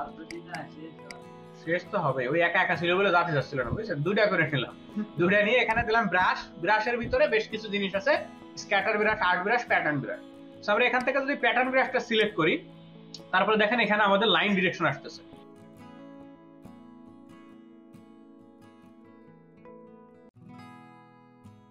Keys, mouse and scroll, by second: 0.4 double click, 18.0 double click, 19.7 ctrl+double click, 20.6 double click.